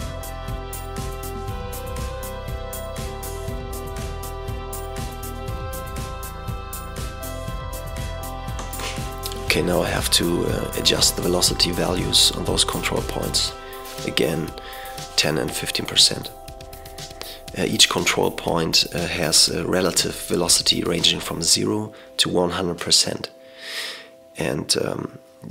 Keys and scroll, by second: 8.6 v, 11.7 typing, 14.5 typing, 16.6-16.9 typing, 19.5 typing, 21.7-22.1 typing, 24.4 typing.